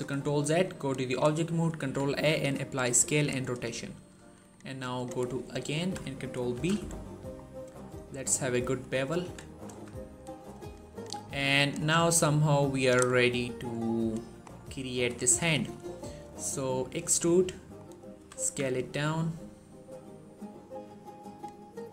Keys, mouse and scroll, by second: 0.5 click, 1.6 ctrl+a, 2.8 click, 6.4 ctrl+b, 7.2-8.6 scroll down 1, 8.6 click, 9.1-9.6 typing, 10.6 click, 13.1 scroll down 1, 14.3 scroll up 1, 15.4 shift+middle click, 15.6 scroll up 1, 16.9 e, 17.6 click, 18.0 typing, 20.3 typing, 21.1 click, 21.6 e.